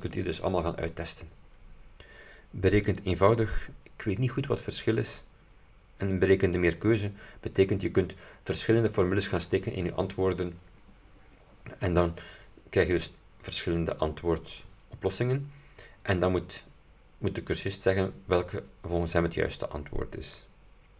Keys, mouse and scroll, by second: 3.0 click, 6.6 click.